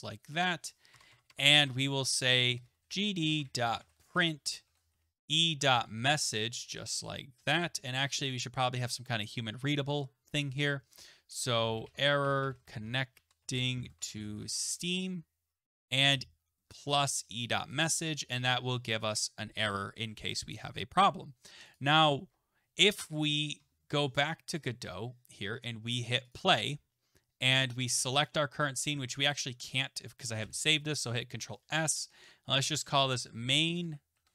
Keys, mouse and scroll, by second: 1.3 Tab, 1.3 click, 1.7 Tab, 2.2-8.1 typing, 6.6 Right, 9.2 click, 11.4-17.3 typing, 17.8-19.6 ctrl+drag, 18.0 ctrl+s, 21.7 click, 24.6 click, 26.8 click, 30.4 ctrl+s, 32.4-34.3 typing.